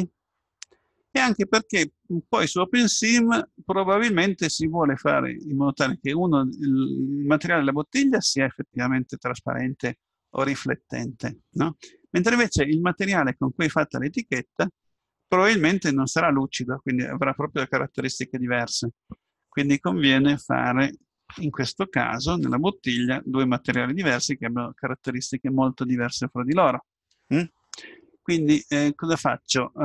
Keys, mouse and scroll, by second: 27.4-29.8 middle drag.